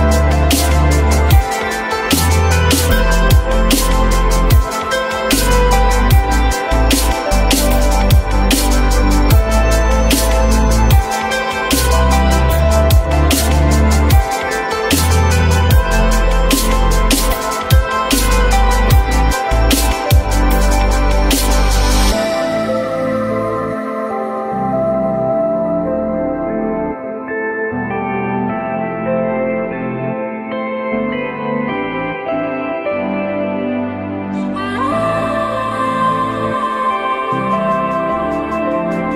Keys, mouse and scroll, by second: 0.5 alt+middle click, 1.4 alt+scroll up 1, 2.3 alt+middle click, 6.7 ctrl+click, 12.4 ctrl+z, 14.6 ctrl+click, 17.4 alt+middle click, 18.0-18.3 alt+scroll up 1, 28.3 ctrl+click, 28.8 ctrl+click, 28.9 ctrl+double click, 29.2 ctrl+click, 29.6 ctrl+click, 29.7 ctrl+double click, 30.0 ctrl+click, 30.9 ctrl+z, 32.2 alt+middle click, 32.4 alt+middle click, 33.3 alt+middle click, 36.2 ctrl+click, 37.3 alt+middle click.